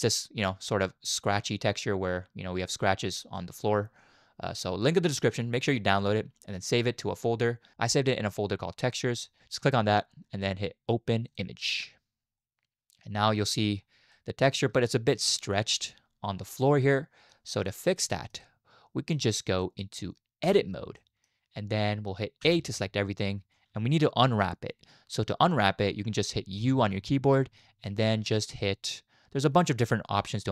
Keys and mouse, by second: 12.4-13.2 middle drag, 14.1 drag, 14.1-14.6 middle drag, 14.1 right drag, 15.3-17.3 middle drag, 15.9 click, 15.9 right click, 17.5 middle click, 18.1 shift+middle click, 18.2 shift+click, 18.4 middle click, 19.6 middle click, 20.4 Tab, 21.0 middle click, 22.4 a, 26.6 u.